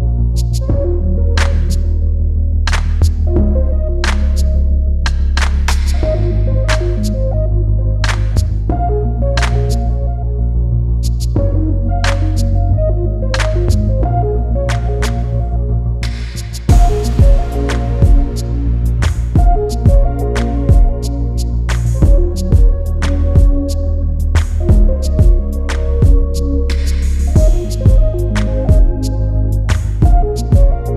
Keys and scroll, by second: 3.8 Return.